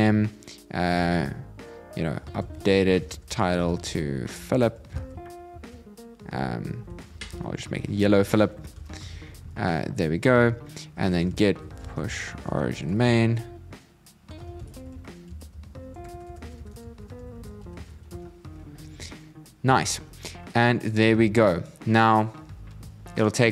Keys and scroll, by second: 5.3 shift+', 7.0 alt+Left, 8.8 super+Right.